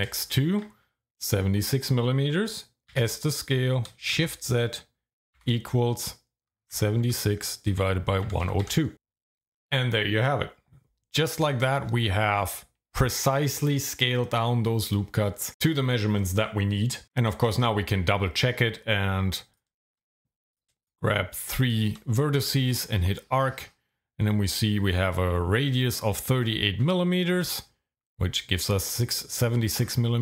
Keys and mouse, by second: 0.3 alt+shift+click, 2.9 s, 4.2 shift+z, 5.4 =, 6.7 KP_7, 7.0 KP_6, 8.2 KP_1, 8.4 KP_0, 8.6 KP_2, 8.9 KP_Enter, 17.1 Tab, 19.5 click, 21.6 shift+click, 22.7 click.